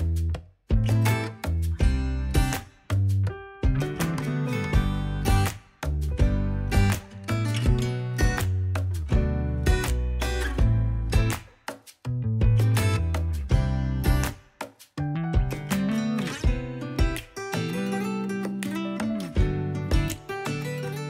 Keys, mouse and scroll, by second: 0.1 middle click, 0.2 click, 0.3 scroll down 4, 0.3 middle click, 0.6 middle click, 0.7 KP_1, 1.2 scroll up 4, 1.3 KP_3, 1.5 shift+middle click, 1.6-2.7 drag, 2.7 middle click, 2.9 click, 2.9 middle click, 3.0-3.4 scroll down 4, 3.4 middle click, 3.6-5.4 typing, 3.7 ctrl+s, 3.9 ctrl+Tab, 4.1 click, 4.2 click, 4.6 scroll up 7, 5.7 shift+middle click, 5.7 ctrl+Tab, 6.0-7.4 drag, 7.4 scroll up 3, 7.4 click, 8.0 scroll down 2, 8.1 middle click, 8.4 KP_3, 8.5 alt+z, 8.7 click, 8.8 alt+z, 8.9-10.0 drag, 10.0 middle click, 10.4 click, 10.8 middle click, 10.9 click, 11.2 KP_1, 11.6 f, 11.7 click, 12.1 scroll up 2, 12.3 shift+click, 12.4 scroll down 1, 12.5 shift+click, 12.8 middle click, 12.9 shift+click, 13.1 middle click, 13.2 click, 13.8 scroll down 11, 14.2 scroll up 4, 14.3 click, 14.3 shift+middle click, 14.5 shift+middle click, 15.1 middle click, 15.2 click, 15.5 middle click, 15.7 click, 15.8 middle click, 16.0 click, 16.1 middle click, 16.3 click, 16.5 middle click, 16.9 click, 17.1 middle click, 17.2 scroll down 4, 17.3 middle click, 17.5 scroll up 3, 17.6 middle click, 17.7 click, 17.9 middle click, 18.2 scroll down 3, 18.3 middle click, 18.6 KP_1, 18.7 scroll up 4, 18.8 alt+z, 18.9 click, 19.8 alt+z, 19.9 click, 20.2 ctrl+Tab, 20.3 ctrl+a, 20.5 click.